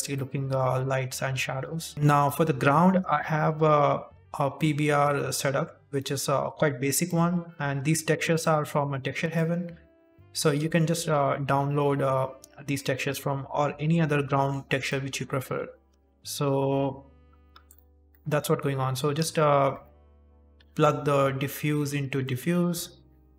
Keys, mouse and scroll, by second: 3.6 click, 3.9 click, 6.4 click, 7.0 click, 17.6 click, 19.2 click.